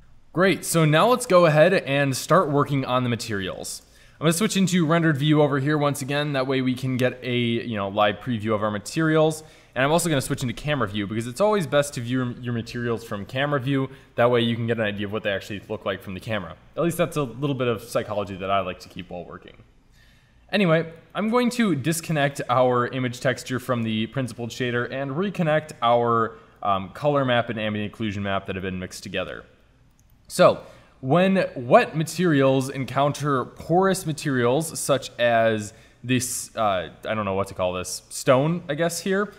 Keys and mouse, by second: 0.0 shift+z, 3.8 shift+z, 10.2 KP_0, 21.0 click, 23.0 middle click, 24.5 drag, 26.8 click, 29.7-32.4 drag, 33.8 middle click, 37.7 middle click, 37.9 middle click.